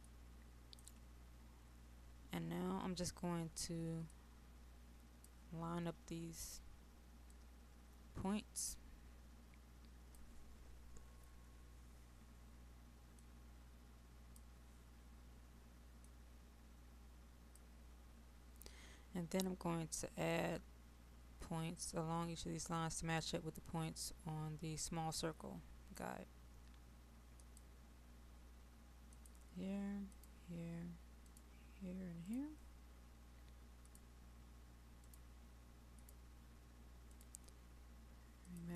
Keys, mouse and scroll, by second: 0.2 click, 2.4-4.1 scroll down 1, 4.1-38.7 drag.